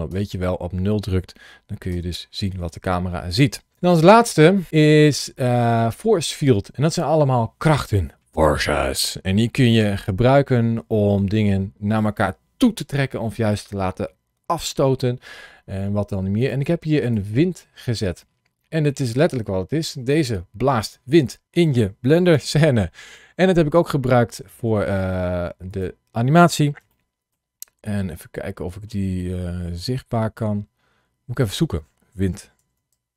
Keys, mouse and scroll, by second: 1.7 KP_0, 3.7 shift+s, 4.7 shift+a, 16.2 click, 16.9 click, 17.4 middle click.